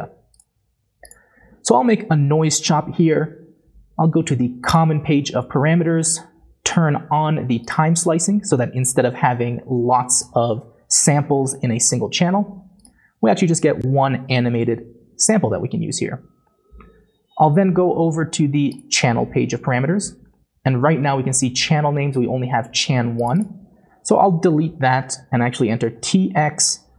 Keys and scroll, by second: 24.5 BackSpace, 25.9-26.3 typing.